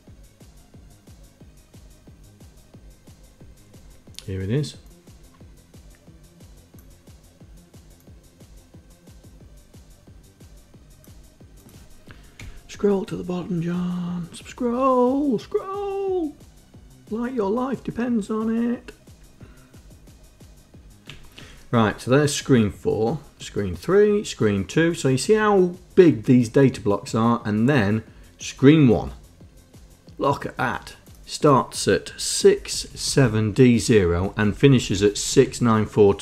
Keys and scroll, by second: 12.8 Page_Down, 33.1 shift+Right, 33.3 shift+Right, 33.4 shift+Right, 33.6 shift+Right, 34.5 Down, 34.7 Left, 34.8 Left, 35.0 Left, 35.4 shift+Right, 35.7 shift+Right, 35.8 shift+Right.